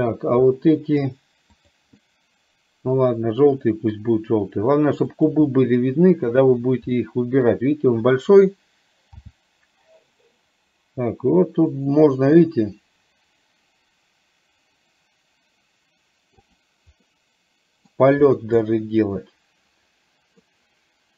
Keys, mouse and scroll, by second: 1.6 click, 3.7 middle click, 5.3 click, 6.5 shift+click, 7.0 middle click, 17.2 middle click, 17.2 scroll up 1, 18.7 scroll up 1, 18.8-20.5 middle drag, 20.5 scroll down 1.